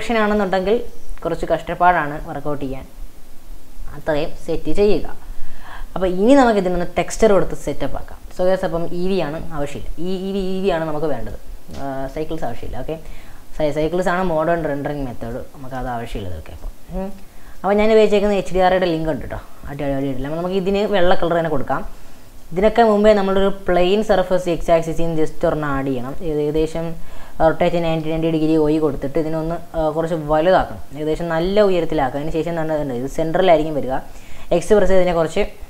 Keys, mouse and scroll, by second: 0.3 click, 0.9-3.9 middle drag, 3.9 click, 6.4-8.2 scroll down 1, 8.2-9.5 scroll down 1, 14.5 click, 15.4-16.4 middle drag, 16.4 scroll up 1, 16.6-17.3 middle drag, 17.3 scroll down 2, 17.6-19.7 middle drag, 19.7 click, 20.1 scroll up 1, 20.3 shift+middle click, 20.9 click, 21.5 scroll down 3, 21.8 shift+middle click, 22.4 scroll down 1, 23.0-24.0 middle drag, 24.0 click, 24.6 shift+right click, 25.5 shift+a, 27.6 r, 29.4 s, 31.8-33.4 middle drag, 33.4 g.